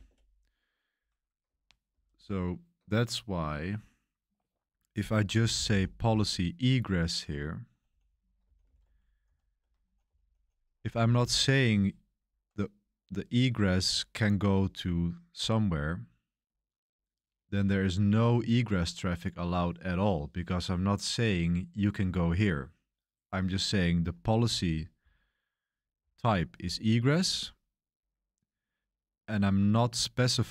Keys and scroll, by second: 0.0 Return, 1.9 super+3, 5.3-6.0 typing, 7.1-11.3 typing, 16.8-17.9 typing, 24.6-25.9 typing, 27.0 j.